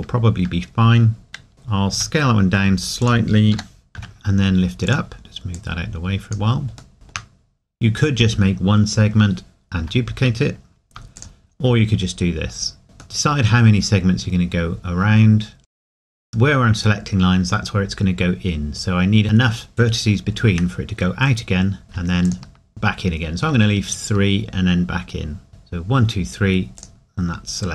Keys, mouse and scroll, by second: 1.9 s, 3.0 click, 3.5 g, 4.9 click, 6.9 shift+middle click, 7.4-8.7 scroll up 1, 9.8 Tab, 13.2 middle click, 16.2 shift+middle click, 16.3 ctrl+z.